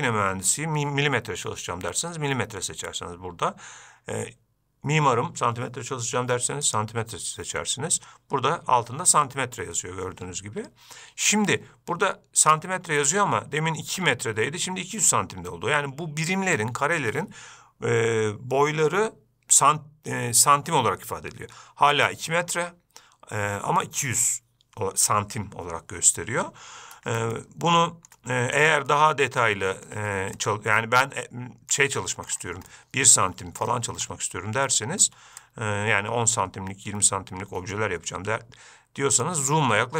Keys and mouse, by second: 27.7-28.4 ctrl+middle drag, 29.2-30.2 ctrl+middle drag, 30.7-32.1 shift+right drag, 33.0-33.5 shift+middle drag, 35.0 shift+middle drag, 35.7-39.6 shift+drag.